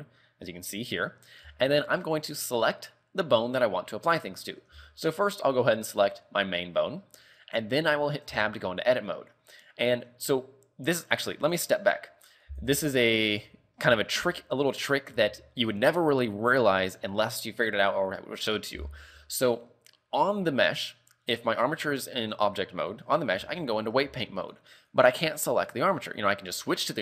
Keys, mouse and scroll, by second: 1.3 scroll down 3, 1.7 shift+middle click, 2.1-3.0 scroll up 4, 3.8 scroll down 1, 5.0 shift+middle click, 6.5 right click, 7.1-7.8 scroll down 4, 8.5 Tab, 10.2 Tab, 12.6 click, 14.0 scroll up 3, 14.4 a, 14.8 right click, 15.4 ctrl+Tab, 19.2 a, 20.4 right click, 20.7-21.1 scroll down 3, 21.5 right click, 23.0 right click, 23.7 ctrl+Tab, 24.1-24.7 scroll up 3, 24.7 right click, 25.1 right click, 25.7 right click, 26.9 right click.